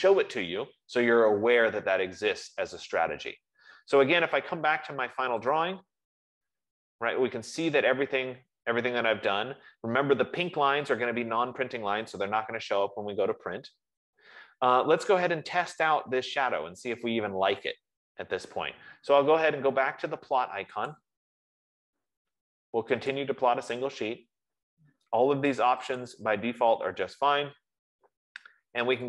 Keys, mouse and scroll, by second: 6.0-10.9 drag, 21.3 click, 23.5 click, 26.3 click.